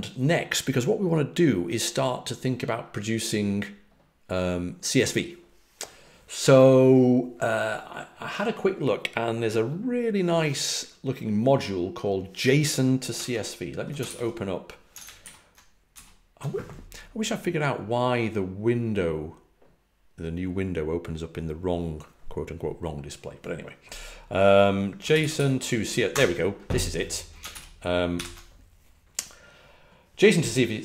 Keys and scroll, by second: 13.1 super+Tab, 14.0 super+n, 15.1 ctrl+alt+super+Left, 15.8 alt+super+Right, 24.8-26.5 typing, 27.4 alt+super+Right, 28.0 alt+super+c.